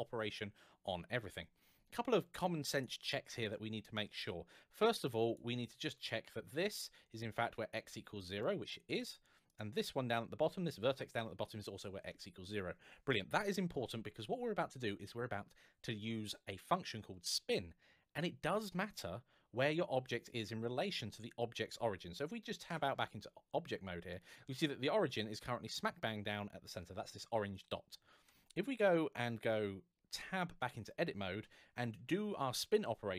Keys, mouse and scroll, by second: 2.1 scroll up 1, 2.6-3.2 scroll down 1, 3.3 shift+middle click, 5.0 click, 8.2 shift+middle click, 9.3 click, 10.9 click, 19.2-20.4 scroll down 1, 20.4-22.1 scroll up 1, 22.5 Tab, 22.8-23.4 scroll down 1, 23.4-23.8 scroll up 1, 23.9 shift+middle click, 29.9 Tab, 31.2 a, 31.6-32.2 scroll down 1, 32.2 shift+middle click.